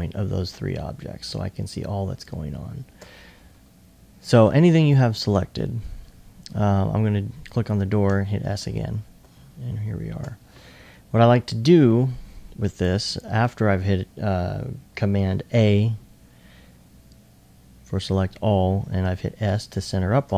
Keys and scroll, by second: 8.1 s, 8.9 alt+s, 19.0 s.